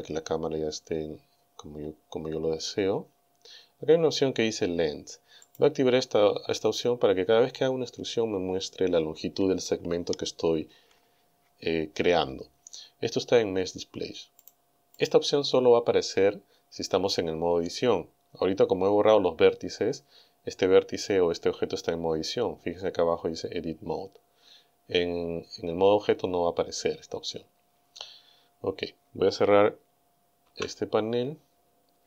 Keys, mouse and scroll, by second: 1.3-2.0 scroll down 1, 2.3-2.8 scroll down 1, 3.0-3.4 scroll down 1, 5.5 click, 14.4 click, 15.0 click, 30.5 n, 31.7-32.0 scroll up 2.